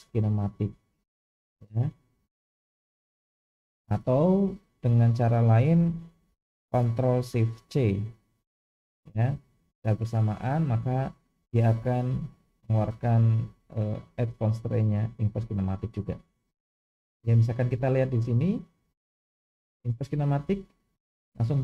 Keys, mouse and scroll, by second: 7.7 ctrl+shift+c, 18.4-20.2 drag.